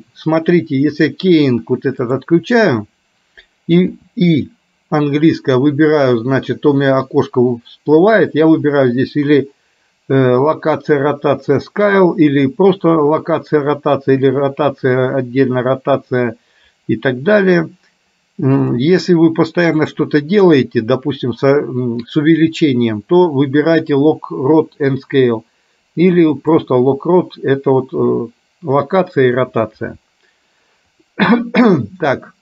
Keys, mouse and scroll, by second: 1.1-2.6 drag, 18.8-27.7 drag.